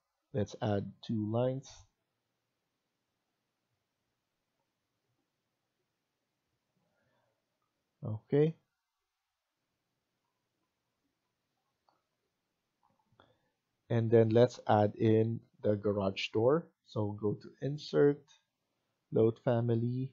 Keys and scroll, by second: 3.1 Escape, 6.7 Escape, 7.0 Escape.